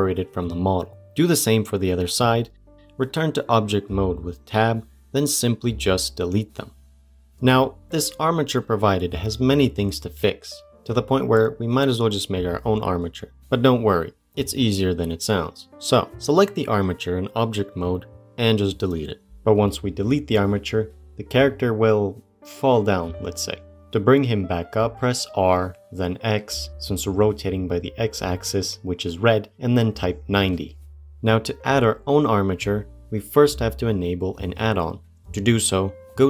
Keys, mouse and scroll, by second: 0.2 middle click, 0.4 click, 1.1 l, 2.0 p, 2.7 middle click, 3.1 Tab, 3.8 click, 4.8-5.3 middle drag, 5.3 Delete, 5.9 click, 6.5 Delete, 18.9 Delete, 20.4-22.7 middle drag, 22.7 click, 24.8 r.